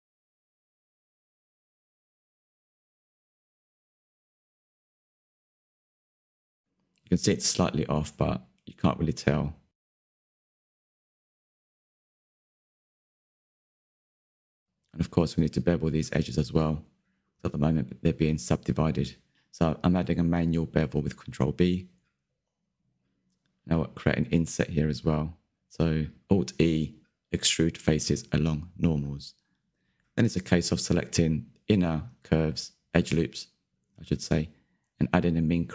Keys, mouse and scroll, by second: 0.5 s, 1.4 click, 2.7 click, 3.5-4.0 scroll down 4, 3.6 Tab, 3.7 click, 4.0 shift+middle click, 4.3 scroll up 7, 4.6 z, 4.7 click, 4.8 Tab, 5.1 alt+click, 6.8 shift+middle click, 6.9-7.7 scroll up 2, 7.7 r, 8.7 click, 9.5 s, 10.8-11.3 scroll down 2, 10.9 middle click, 11.3 shift+middle click, 11.6 scroll up 4, 11.9 shift+middle click, 12.6 KP_3, 12.8 scroll up 2, 13.1 alt+click, 14.3 click, 14.4-15.6 shift+middle drag, 15.6 s, 16.3 middle click, 16.6 alt+shift+click, 16.7 scroll down 1, 16.9 shift+middle click, 17.3 alt+shift+click, 17.5 alt+shift+click, 17.8 middle click, 18.0-18.4 scroll down 1, 18.5 ctrl+b, 19.8 scroll down 1, 19.9 shift+middle click, 20.2 Tab, 20.5 click, 20.6 click, 20.7 scroll down 2, 20.8-21.3 middle drag, 21.3 click, 21.4 Tab, 21.5-22.3 scroll up 5, 22.3 alt+Left, 23.5 3, 24.0 alt+Left, 24.1-26.2 middle drag, 26.2 alt+e, 27.8 click, 27.9 middle click, 28.2 1, 28.3 shift+middle click, 28.5 scroll up 3, 28.6 middle click, 29.1 1, 29.3 2, 29.4 alt+click, 29.5 middle click, 30.0 alt+shift+click, 30.1 scroll down 2, 30.4 shift+middle click, 30.6-31.2 scroll up 3, 31.2 alt+shift+click, 31.3 scroll down 2, 31.4 middle click, 32.4-32.9 scroll up 2, 32.9 middle click, 33.1 alt+shift+click, 33.2 scroll down 2, 33.3 shift+middle click, 33.7 scroll up 6, 33.8 shift+middle click, 34.1 alt+shift+click, 34.3 shift+middle click, 34.6 alt+shift+click, 34.8-35.1 scroll down 1, 35.1 n, 35.4 click.